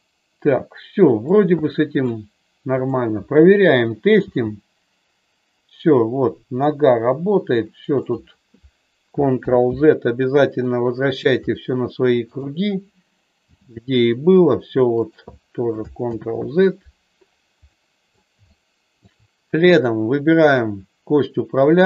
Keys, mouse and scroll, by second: 1.6 middle click, 2.9 click, 5.0 g, 9.4 ctrl+z, 10.6 middle click, 13.4 g, 15.0 click, 16.1 ctrl+z, 17.8 middle click, 18.5 shift+middle click, 20.4 click.